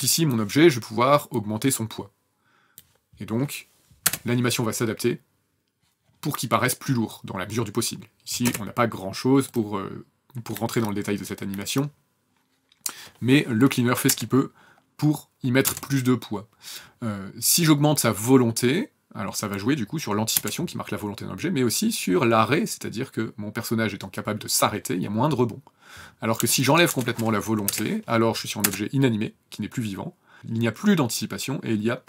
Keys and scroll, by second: 4.0 KP_0, 8.4 space, 14.1 KP_0, 15.7 KP_0, 20.3 KP_0, 26.3 KP_0, 26.9 KP_0, 27.6 KP_Enter, 28.6 KP_0.